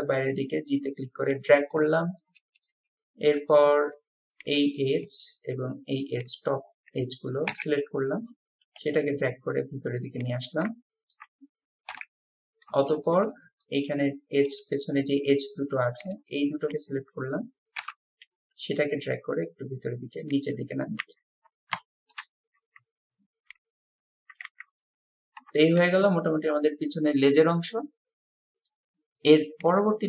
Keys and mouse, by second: 1.9 shift+middle click, 2.4 middle click, 3.4 middle click, 4.6 click, 5.1-6.8 shift+middle drag, 7.5 KP_3, 8.6 g, 10.7 shift+click, 11.2 middle click, 11.9 KP_3, 12.8 shift+middle drag, 13.0 shift+click, 13.2 middle click, 13.4-13.7 drag, 13.7-14.6 middle drag, 14.6 shift+click, 16.7 shift+click, 17.8 KP_3, 19.0 g, 21.1 Tab, 21.8 shift+middle click, 24.5 Tab, 25.8-26.2 shift+middle drag, 26.3-28.7 middle drag, 27.5-28.7 drag.